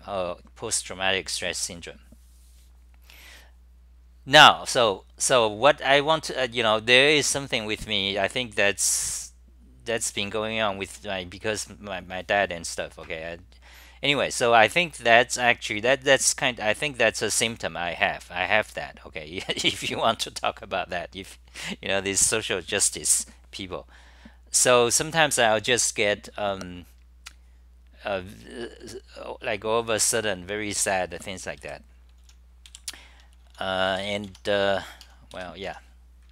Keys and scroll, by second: 33.7-34.4 typing.